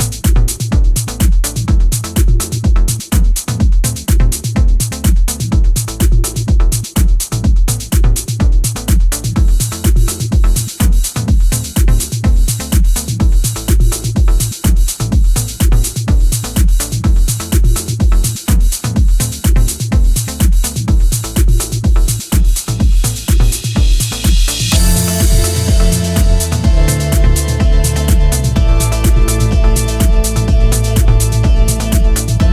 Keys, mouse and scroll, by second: 0.1 click, 0.6 click, 1.2 click, 2.3 click, 2.8 click, 3.5 click, 3.8 click, 4.4 click, 4.7 click, 5.0 middle click, 5.3-5.9 scroll down 3, 5.9 middle click, 6.3-6.7 scroll up 4, 7.2 click, 8.2 scroll down 3, 8.4 middle click, 9.2 middle click, 11.5 click, 12.1 click, 12.6 click, 14.8 ctrl+z, 16.5 click, 17.4 click, 17.9 click, 18.5 click, 23.2 scroll down 2, 23.4-24.1 scroll up 1, 24.1 middle click, 24.4-24.7 scroll up 4, 24.7 middle click, 25.4 click, 26.5 click, 28.1 click, 30.6 click, 31.3 scroll down 3, 31.5 middle click, 32.1 click.